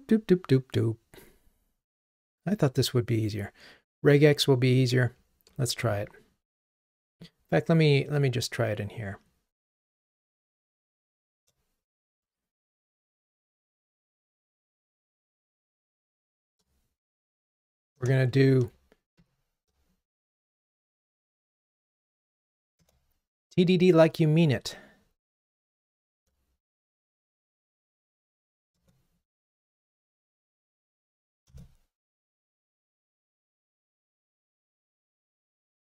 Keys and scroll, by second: 18.1 Return, 22.9 Return, 28.8 alt+Return.